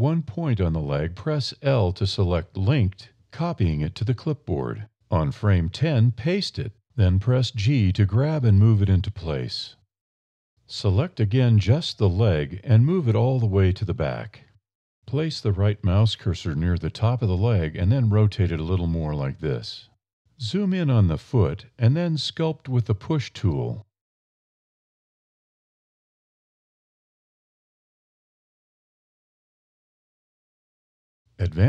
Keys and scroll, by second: 2.0 1, 2.4 super+i, 2.8 super+c, 3.4 super+a, 4.2 alt+a, 5.8 super+v, 7.4 g, 10.1 a, 11.2 1, 17.2 r, 18.6 a, 21.5 alt+e, 28.8 alt+a.